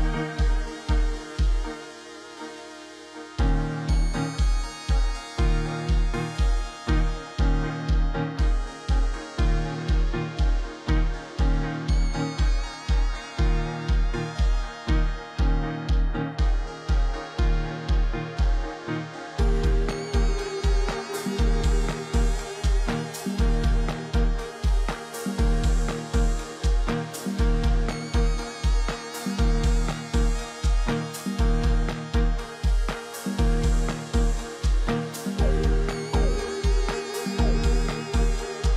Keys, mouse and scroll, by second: 1.0 ctrl+click, 13.4 ctrl+d, 25.1 ctrl+click, 36.4 ctrl+d.